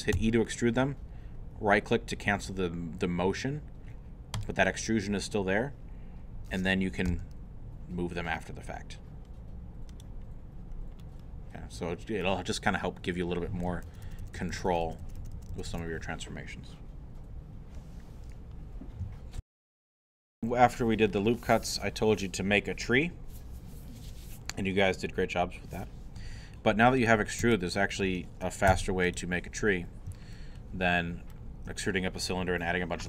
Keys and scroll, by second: 0.2 e, 7.1 g, 13.9 ctrl+z, 19.4 super+., 27.4 Tab, 28.7 x.